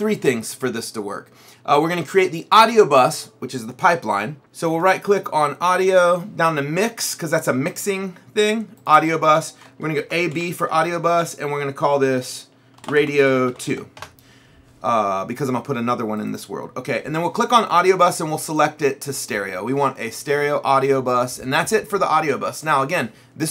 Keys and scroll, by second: 9.8-11.3 typing, 12.6-14.3 typing.